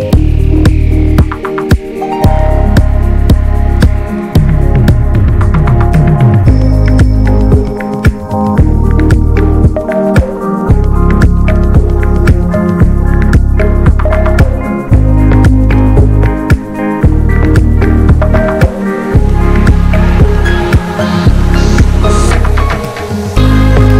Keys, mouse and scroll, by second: 0.2-1.0 scroll up 2, 0.6 middle click, 2.5-3.4 scroll up 7, 3.4 scroll down 1, 3.7 shift+middle click, 4.6 l, 5.0-5.4 scroll down 1, 5.4 ctrl+z, 6.7 scroll up 1, 7.0-8.2 scroll down 1, 8.2 s, 9.7 alt+s, 10.7-11.1 scroll down 1, 11.1 ctrl+z, 11.9 i, 15.0-15.4 scroll up 1, 15.4 shift+middle click, 15.8 ctrl+z, 16.2-17.1 scroll down 1, 17.1 i, 19.8 x, 20.3-20.6 scroll down 11, 21.0 Tab, 21.2 middle drag, 21.5 scroll up 1, 21.6 click, 21.7-22.2 right drag, 22.2 middle click, 22.4 Tab, 22.8 Tab, 23.2-23.9 shift+middle drag, 23.9 ctrl+click.